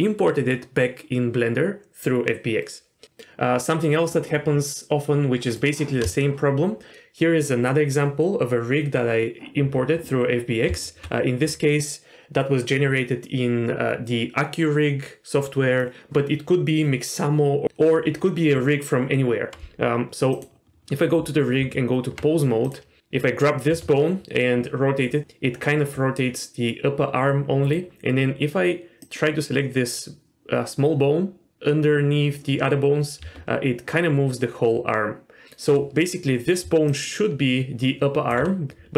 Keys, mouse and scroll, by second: 5.5 click, 6.2-6.9 shift+middle drag, 6.9-7.3 scroll up 2, 10.7 z, 20.3 click, 21.6 Tab, 22.6 click, 23.7 r, 29.0 click, 33.2 r, 36.6 d, 36.9-38.3 drag, 38.3 d, 38.7 ctrl+z, 38.7 d.